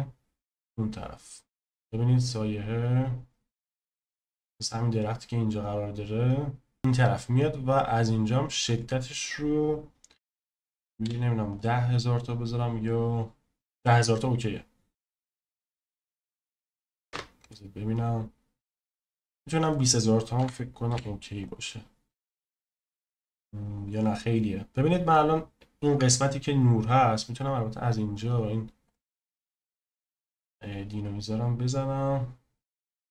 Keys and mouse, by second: 0.6 click, 7.7 click, 8.6-11.5 drag, 17.0 KP_0, 19.8-21.4 drag, 27.8 click, 28.2 click, 28.8 click.